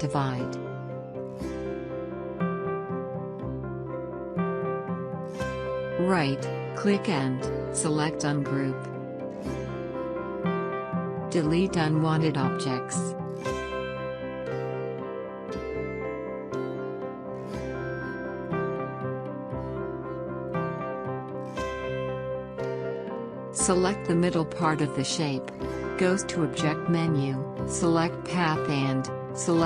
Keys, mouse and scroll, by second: 2.0 click, 4.8 right click, 9.2-14.6 drag, 19.0 click, 20.1 alt+scroll up 1, 21.1 scroll up 1, 23.6 click, 24.2 scroll up 1, 25.3-25.7 scroll down 1, 26.7 click, 27.2 scroll up 1, 28.4 click.